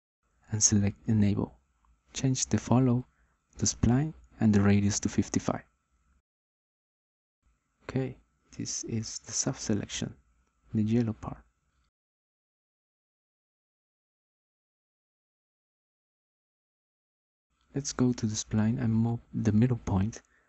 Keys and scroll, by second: 5.8 5, 6.1 Return.